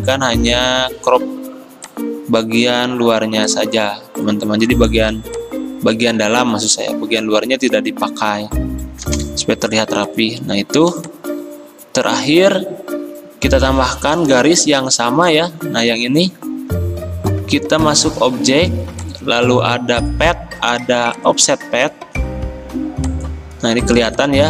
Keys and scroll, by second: 9.1 Return, 15.8 ctrl+z.